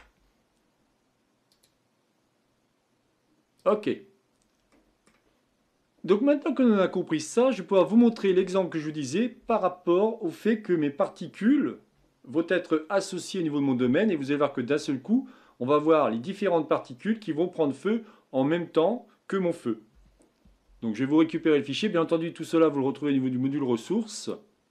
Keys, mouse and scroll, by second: 1.5-4.3 drag, 4.5-10.4 middle drag, 24.2-24.7 drag.